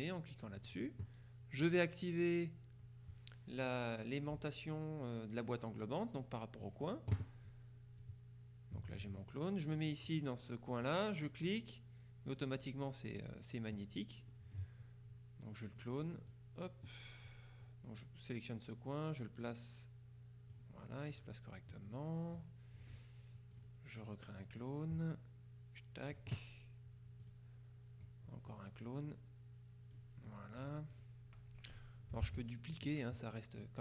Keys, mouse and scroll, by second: 0.7 click, 1.7 click, 6.7 click, 8.1-9.8 drag, 10.9-12.9 drag, 14.4 middle click, 15.8-17.9 drag, 18.1-21.1 drag, 21.2 click, 22.8 click, 23.6 click, 24.5-26.7 drag, 27.3 click, 28.6-30.9 drag, 31.0 click, 32.3 ctrl+d, 32.8-33.8 ctrl+drag.